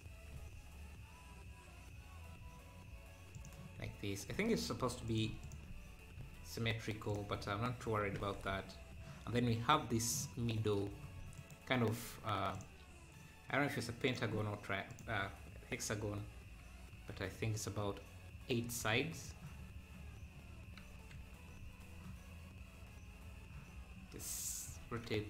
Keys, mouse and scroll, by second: 5.1 click, 5.8 scroll down 2, 8.2 Tab, 9.6 scroll up 1, 11.4 shift+right click, 11.7 shift+a, 14.9-21.0 drag, 21.0 KP_7, 21.5 scroll up 3, 24.7 r.